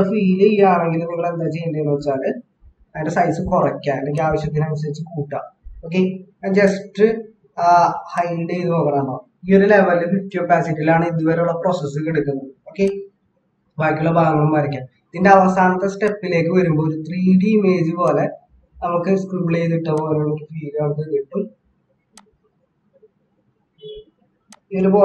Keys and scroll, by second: 5.8 ctrl+-, 13.6 ctrl+=, 13.7 ctrl+=, 14.8 ctrl+=.